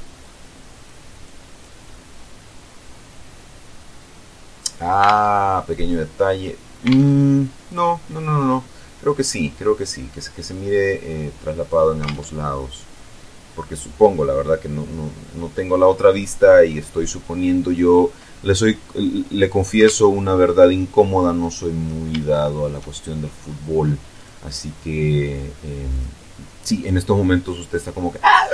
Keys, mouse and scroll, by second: 0.0 click, 1.0 click, 1.6-4.5 middle drag, 4.8 alt+Tab, 6.6 alt+Tab, 7.5-10.4 drag, 10.4-11.2 scroll down 2, 11.8 alt+Tab, 15.6-16.4 scroll up 3, 16.4-17.0 scroll down 2, 17.0-17.4 scroll up 2, 17.7-18.0 scroll down 2, 18.7-19.1 scroll up 2, 19.5 alt+Tab, 20.3 click, 20.5 middle click, 21.3-21.9 scroll up 3, 21.9 shift+middle click, 22.5-23.8 shift+scroll up 4, 23.8 click, 25.5 click, 27.1 middle click.